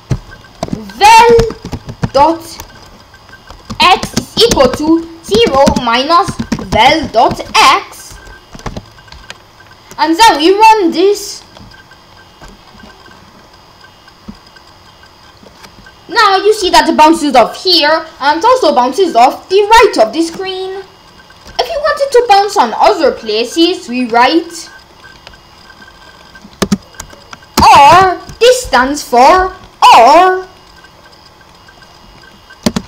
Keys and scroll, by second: 0.7 Return, 0.9-2.6 typing, 3.7-8.6 typing, 25.0 BackSpace, 26.6 space, 27.7 shift+\, 32.7-32.8 typing.